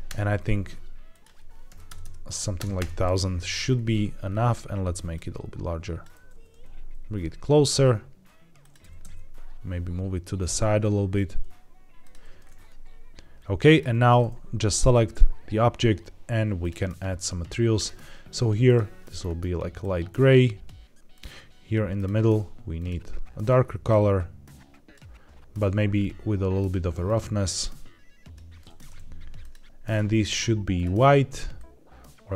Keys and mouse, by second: 1.0-2.7 drag, 1.9 KP_0, 5.1 click, 6.0 g, 6.2 z, 6.4 z, 8.7 g, 8.9 x, 11.9 click, 17.8-18.7 drag, 21.0 click, 21.9 click, 22.6 click, 27.0-28.2 drag, 29.3 click, 29.7 click, 30.6 click.